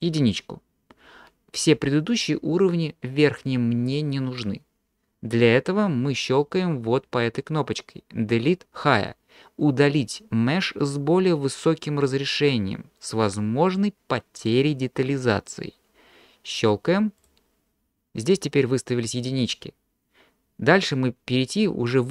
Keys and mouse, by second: 0.1 click, 17.3 click.